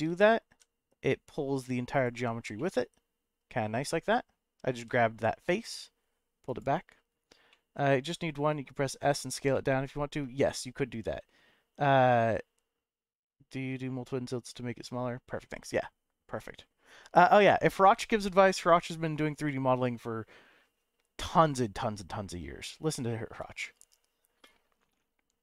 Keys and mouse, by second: 0.1 g, 0.5 y, 1.9 click, 2.7 middle click, 4.7 g, 5.1 y, 6.5 click, 7.6 shift+middle click, 9.7 middle click.